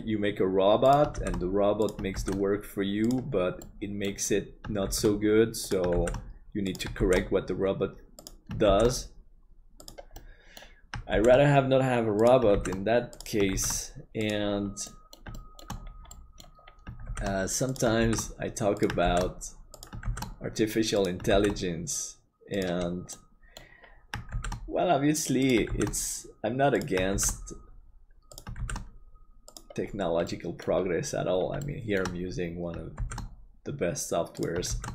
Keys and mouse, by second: 3.7 middle click, 10.2 middle click, 14.9 middle click, 15.4 shift+middle click, 16.2 middle click, 17.1 shift+d, 23.2 middle click, 30.3 middle click, 31.6 shift+middle click, 32.9 shift+d.